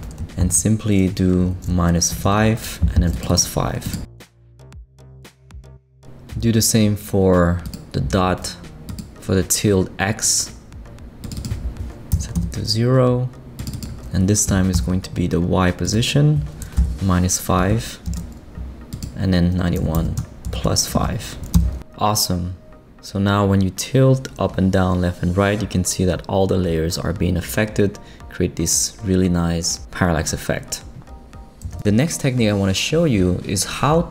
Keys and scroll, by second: 0.1 BackSpace, 1.8 -, 2.2 5, 2.6 Return, 4.4-5.8 typing, 12.1 0, 12.3 Return, 14.5 BackSpace, 14.7 Return, 16.8 -, 17.6 5, 18.1 Return, 19.5-20.9 typing, 21.5 Return.